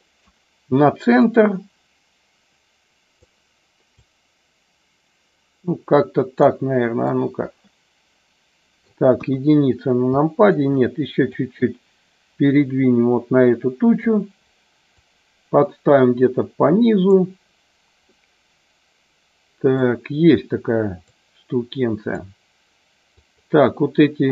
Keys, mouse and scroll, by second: 1.2-3.1 drag, 3.9-6.3 drag, 6.9-9.0 shift+middle drag, 9.1 KP_1, 10.2 shift+middle click, 11.3-14.0 drag, 14.8-17.1 drag, 18.1 scroll up 1, 18.2-19.7 middle drag, 19.7 scroll down 1, 21.0-22.1 drag, 23.2 click.